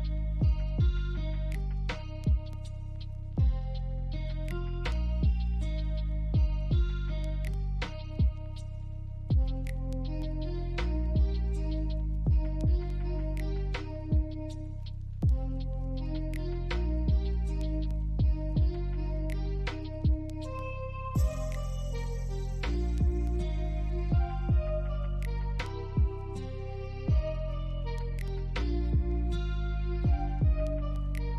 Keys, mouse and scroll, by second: 1.0 typing, 1.0 Return, 2.5 alt+click, 3.2 alt+middle click, 3.6 alt+click, 4.4 alt+middle click, 4.7 right click, 8.4 double click, 13.1 middle click, 14.0-14.3 scroll up 1, 15.0 alt+middle click, 15.6 alt+scroll up 2, 16.1 alt+middle click, 19.2 right click, 21.2 ctrl+click, 23.0 ctrl+click, 25.0 ctrl+click, 27.0 alt+middle click, 28.1 ctrl+click, 30.1 ctrl+click.